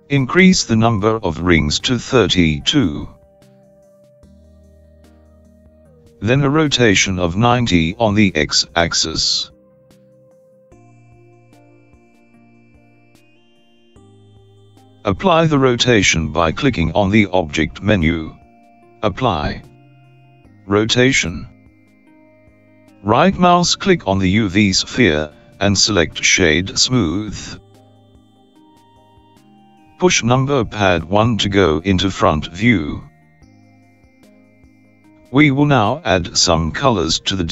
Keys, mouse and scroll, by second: 1.6 click, 7.1 click, 13.7 click, 16.2 click, 26.6 right click, 31.8 KP_1.